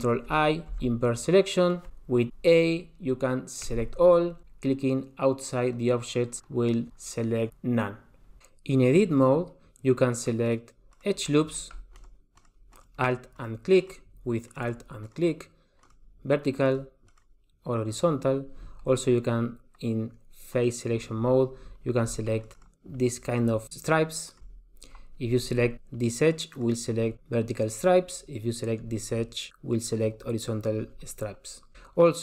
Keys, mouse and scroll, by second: 0.7 ctrl+i, 3.7 a, 6.4 click, 10.4 click, 10.9 click, 11.9 alt+click, 12.3 alt+click, 12.7 alt+click, 13.3 alt+click, 13.8 alt+click, 14.5 alt+click, 15.0 alt+click, 15.8 alt+click, 16.6 alt+click, 17.1 alt+click, 20.5 click, 22.4 alt+click, 22.7 alt+click, 23.5 alt+click, 23.8 alt+click, 24.5 alt+click, 24.6 alt+click, 26.7 alt+click, 30.1 alt+click.